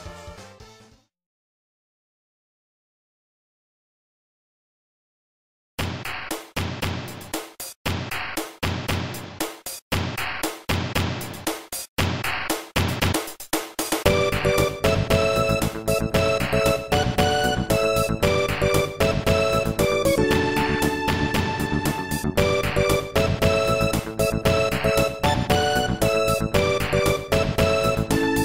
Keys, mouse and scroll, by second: 2.7 Tab, 3.8 ctrl+s, 4.3 typing, 6.2 scroll down 1, 7.1 ctrl+s, 7.3 click, 7.9 0, 8.8 ctrl+s, 9.0 click, 13.4 click, 14.1 click, 28.2 click.